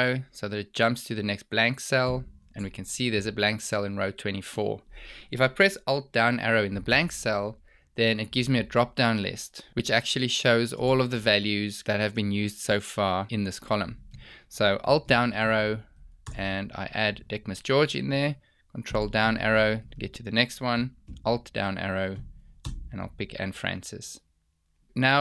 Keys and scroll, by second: 2.1 ctrl+Down, 6.8 alt+Down, 10.7 ctrl+space, 14.9 alt+Down, 18.9 ctrl+Down, 20.9 alt+Down.